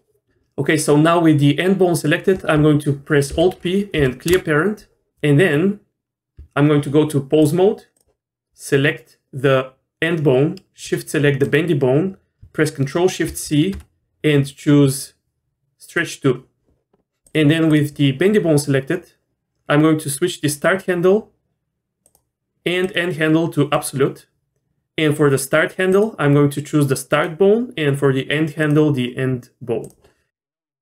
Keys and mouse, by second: 3.3 alt+p, 6.4 Tab, 7.5 click, 11.4 shift+click, 13.2 ctrl+shift+c, 17.3 click, 20.6-22.1 drag, 23.0-23.8 drag, 26.0-27.2 drag, 28.8-29.9 drag.